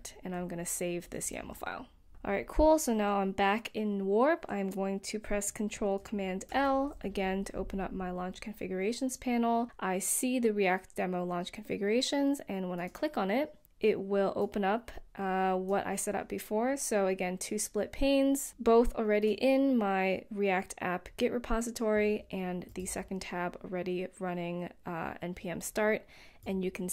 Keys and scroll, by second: 6.4 ctrl+super+l.